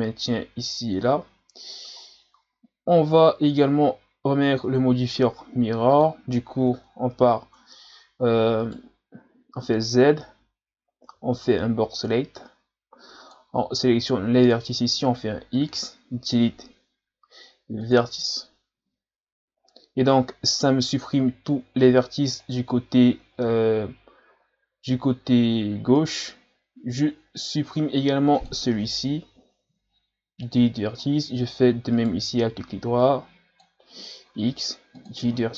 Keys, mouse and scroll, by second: 1.2 scroll down 3, 2.0 scroll down 5, 5.9 click, 6.7 Tab, 7.6 Tab, 8.6 right click, 9.3 z, 11.1 b, 15.6 x, 18.9 z, 19.6-20.5 ctrl+scroll up 1, 20.5-21.9 scroll up 2, 22.4 alt+right click, 23.3 g, 27.8-29.5 drag, 29.5 Delete, 31.0 scroll down 4, 31.9 alt+right click, 33.0-34.3 drag, 34.3 x.